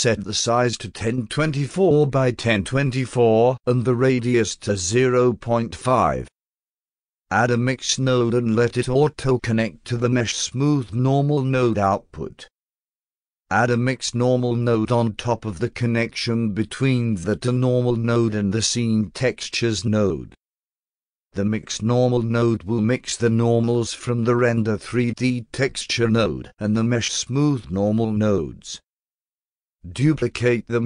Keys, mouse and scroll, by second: 0.2 click, 0.5-3.1 typing, 4.9 click, 7.9 click, 10.0-12.3 drag, 14.1 click, 15.5-17.7 drag, 22.7 click, 27.9 click, 28.1 click, 30.0-30.8 shift+drag.